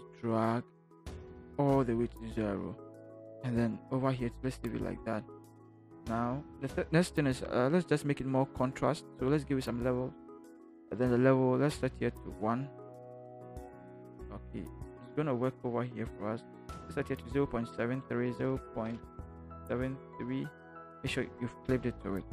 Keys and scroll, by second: 13.5 1, 18.3 0.